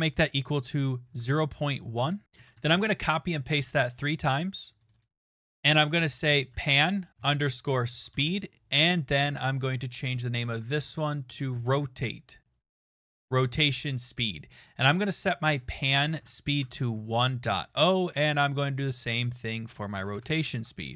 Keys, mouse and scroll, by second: 1.3-2.5 typing, 2.6 ctrl+v, 2.7 ctrl+v, 4.2 click, 4.4 click, 5.0 click, 6.0-8.7 typing, 9.1 click, 9.2 click, 10.1 Left, 10.3 Delete, 10.5 Delete, 10.6 Delete, 10.7 Delete, 12.4-13.4 typing, 15.4 click, 15.9-18.2 typing, 19.4 click, 19.7-20.9 typing.